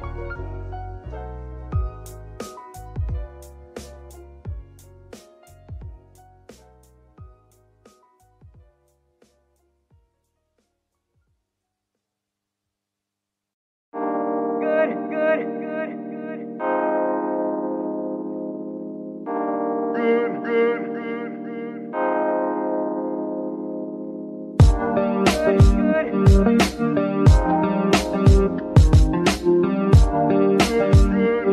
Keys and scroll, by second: 13.8 ctrl+Tab, 14.7 ctrl+Tab, 15.1 ctrl+g, 15.5 ctrl+Escape, 19.1 KP_Decimal.